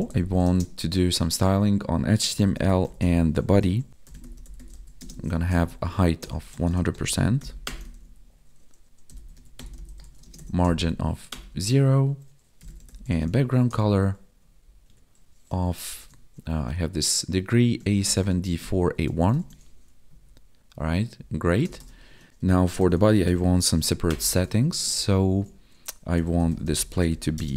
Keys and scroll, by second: 0.3 space, 4.9 space, 7.9 ctrl+s, 10.2 space, 14.4 Down, 14.8 Tab, 19.3 ctrl+s, 20.0 Right, 21.1 Down, 24.5 ctrl+s, 24.9 ctrl+Down, 27.3 space.